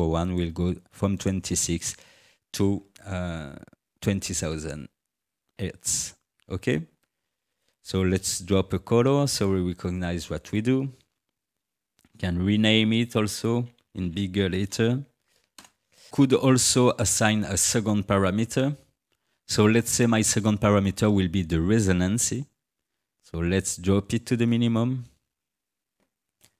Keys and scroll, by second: 11.6 ctrl+r, 12.9 Caps_Lock, 13.3-14.6 typing, 15.6 Return.